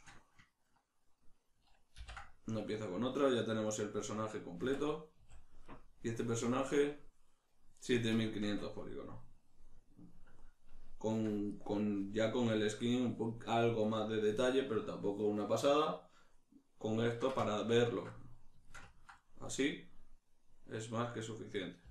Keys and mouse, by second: 2.0 ctrl+j, 2.8-21.9 middle drag, 4.6 Tab, 8.4 Tab, 21.8 a.